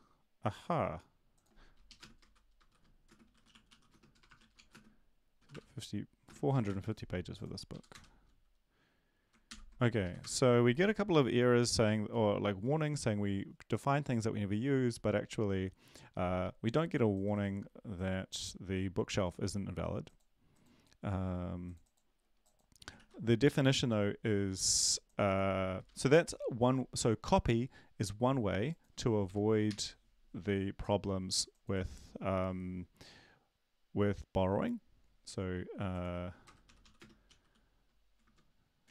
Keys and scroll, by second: 1.9 Left, 3.0-6.2 typing, 6.6 ctrl+s, 7.7 Up, 9.5 ctrl+l, 10.0 Up, 10.2 Return, 23.0 ctrl+`, 25.8 Right, 29.7 ctrl+s, 37.2-37.9 typing, 38.8 shift+Home.